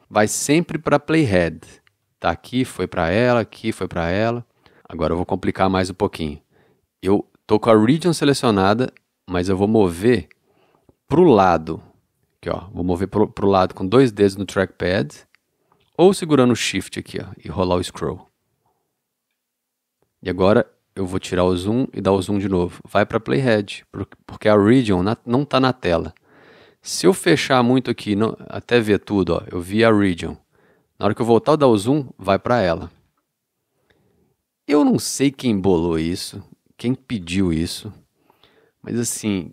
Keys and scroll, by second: 37.2 d.